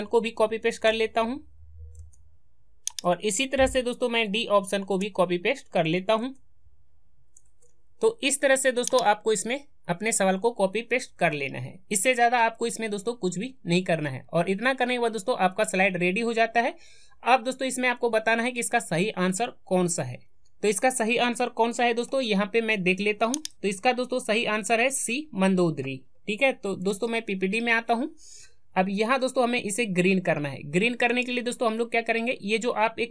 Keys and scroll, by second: 6.1 alt+Tab, 26.9 alt+Tab.